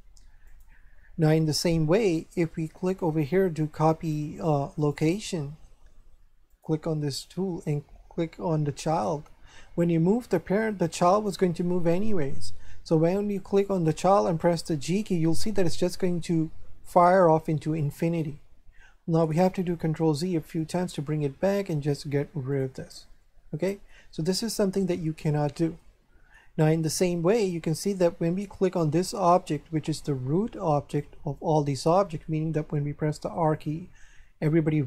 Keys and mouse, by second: 0.4 click, 2.8 click, 4.8 click, 6.5 click, 8.9 click, 11.7 shift+middle click, 13.5 right click, 14.8 g, 17.8 right click, 19.6 ctrl+z, 22.5 click, 23.2 shift+middle click, 25.8 shift+middle click, 27.1 shift+middle click, 28.9 right click, 33.4 r.